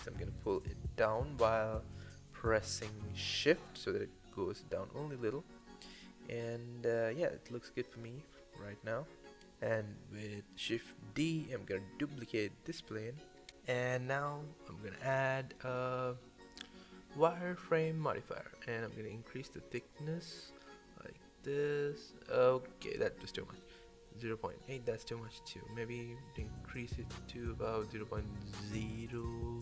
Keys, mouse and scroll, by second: 0.7 g, 3.0-4.0 middle drag, 4.0 scroll up 1, 4.2-4.9 scroll down 2, 4.9 KP_1, 5.3-5.9 scroll up 14, 5.9-6.4 scroll down 11, 6.4-7.1 middle drag, 7.1 scroll down 2, 7.4-10.1 middle drag, 11.2 click, 11.6 click, 12.4 shift+d, 13.4 click, 14.3-15.7 middle drag, 15.7 click, 16.4-18.5 drag, 19.2-24.6 drag, 25.2-28.4 drag, 29.0-29.6 drag.